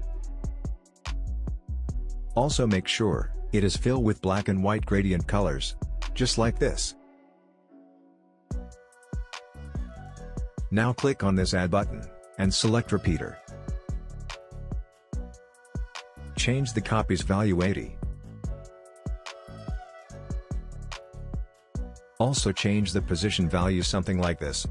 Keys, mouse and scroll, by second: 5.8 click, 9.9 click, 13.8-20.8 drag, 17.0-18.9 drag, 21.7 click, 22.5-23.0 scroll down 1, 23.1-23.5 alt+scroll down 1.